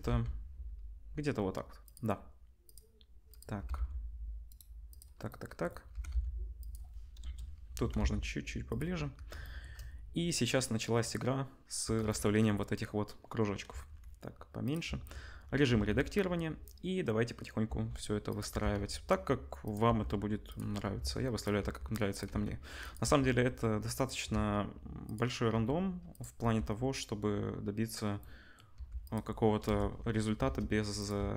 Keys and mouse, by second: 1.9-2.6 middle drag, 2.6 click, 2.7 middle click, 3.3 click, 3.3-4.8 middle drag, 3.5 g, 4.8 click, 4.9-12.0 middle drag, 5.9 g, 7.1 KP_0, 7.7 g, 12.0-12.3 shift+drag, 13.7 s, 14.8 Tab, 15.7 a, 17.6 r, 18.5 r, 19.8 g, 20.9 shift+d, 21.5 r, 22.2 s, 23.0 g, 24.3 shift+d, 25.5 r, 26.4 g, 28.7 g, 29.6 KP_0, 30.4 shift+d, 31.1 s.